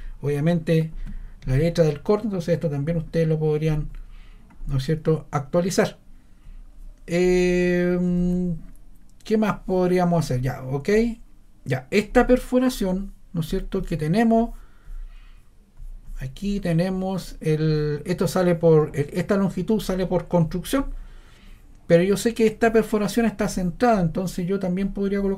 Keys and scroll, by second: 7.4 super+z, 8.1 super+z.